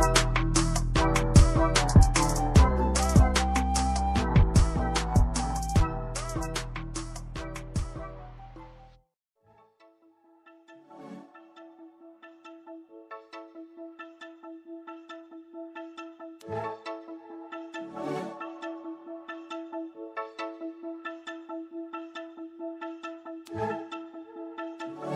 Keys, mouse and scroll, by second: 0.9 double click, 1.1 scroll down 1, 1.4 click, 2.2 ctrl+c, 2.4 ctrl+v, 3.4 click, 8.2 click, 8.9 right click, 9.4 click, 19.7 click, 20.5 scroll up 1, 21.2 scroll down 1, 22.3 click, 22.5 double click, 22.9 scroll up 1.